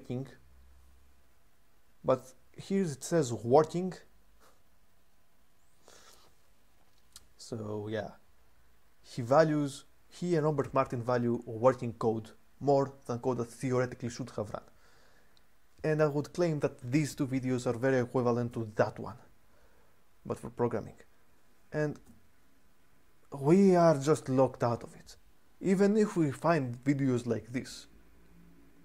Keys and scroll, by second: 18.3 j, 21.8 k.